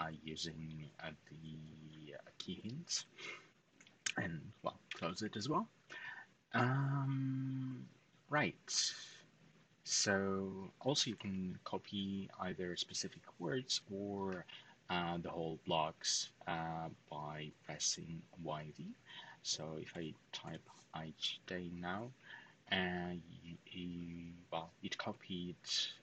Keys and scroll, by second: 2.7 typing, 4.4-5.2 typing, 10.6-11.4 typing, 19.5-20.2 typing.